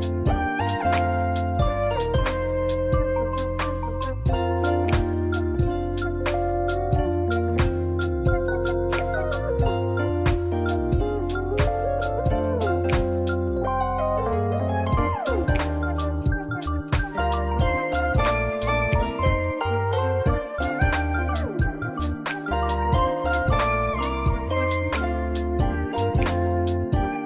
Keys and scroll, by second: 1.8 scroll down 1, 2.0 scroll up 1, 3.4 scroll up 1, 4.7 scroll up 1, 12.0 scroll down 1, 12.2 scroll up 1, 13.6 scroll down 1, 13.8 scroll up 1, 15.5 scroll down 1, 15.6 scroll up 1, 19.6 scroll down 1, 19.7 scroll up 1, 21.4 scroll down 1, 21.5-21.8 scroll up 1, 22.9 scroll down 1, 23.1 scroll up 1.